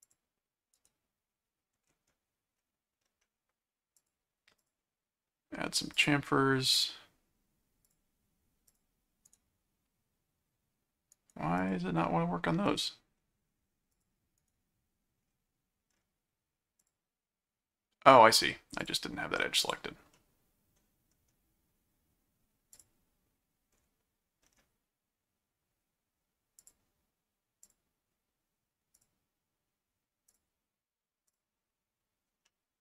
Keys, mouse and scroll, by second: 0.0 click, 0.7 right click, 4.0 click, 4.6 click, 5.9 click, 7.8 click, 8.7 click, 11.1 right click, 11.6 click, 12.6 click, 13.9 click, 14.4 right click, 16.8 click, 18.8 click, 19.6 click, 20.1 middle click, 22.7 click, 26.6 click, 27.6 click, 29.0 click, 30.3 click, 31.3 click, 32.5 middle click.